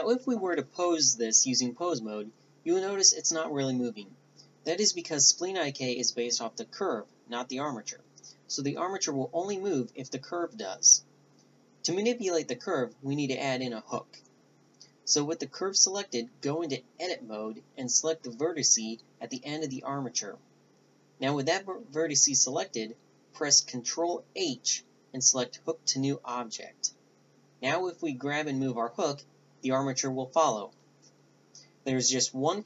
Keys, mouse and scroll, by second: 5.6 a, 6.1-7.9 drag, 7.9 Tab, 8.8-11.2 drag, 12.0 click, 16.0 ctrl+h, 23.2-24.6 drag, 27.8 a, 28.2-29.5 middle drag, 29.2 Tab, 29.5-31.3 drag, 31.3-32.0 middle drag, 32.0 g.